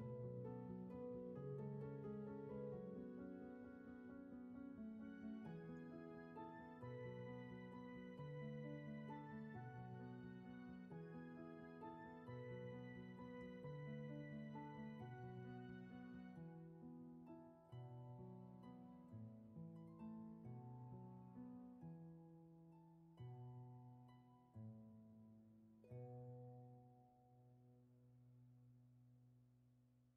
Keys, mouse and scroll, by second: 0.1 ctrl+z, 2.1 ctrl+z, 3.0 scroll down 1, 3.5 space, 6.9 ctrl+z, 11.3 ctrl+z, 14.9 ctrl+z, 17.2 ctrl+z, 20.5 ctrl+z, 22.8 ctrl+z, 26.4 ctrl+z, 29.3 ctrl+z.